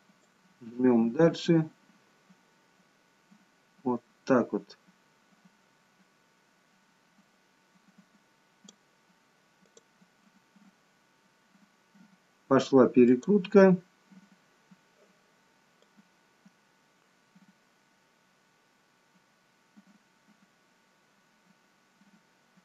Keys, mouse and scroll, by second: 0.3 click, 9.7 click, 13.1 click, 15.9 click.